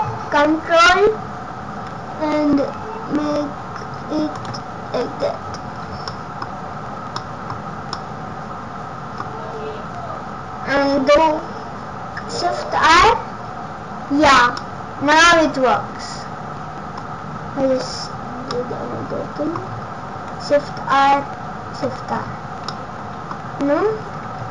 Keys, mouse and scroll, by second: 4.8-5.7 scroll up 1, 5.7-6.3 scroll down 5, 6.1 middle click, 6.4-7.1 scroll up 5, 7.1 middle click, 9.4-10.4 scroll up 1, 12.9 shift+r, 13.4-14.1 scroll down 4, 14.6 middle click, 17.1 scroll up 1, 18.5 middle click, 18.5 scroll up 3, 19.6 scroll down 2, 20.1 scroll down 2, 20.4 shift+r, 21.7 shift+r, 22.1-22.6 scroll down 7, 22.7 middle click, 24.3 ctrl+z.